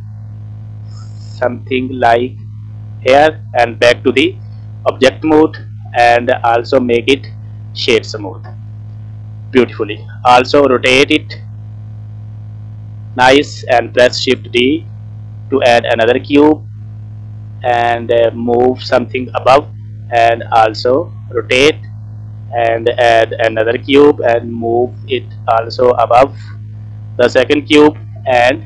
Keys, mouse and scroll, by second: 3.6 Tab, 4.0 middle click, 5.0 shift+middle click, 5.4 middle click, 6.3 click, 7.0 right click, 7.5 middle click, 7.5 scroll down 1, 8.1 scroll up 2, 8.5 scroll down 3, 8.7 middle click, 9.5-10.0 scroll down 1, 10.4 r, 14.5 shift+d, 19.1 click, 19.8 r, 22.4-23.0 scroll down 1, 23.6 shift+d, 28.0 r.